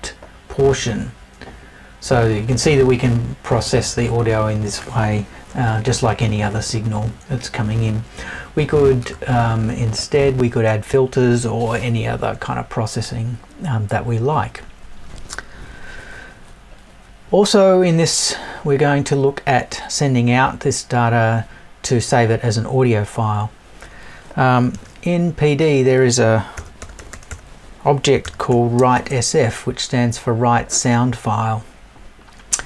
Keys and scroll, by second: 5.7 Left, 7.0 Left.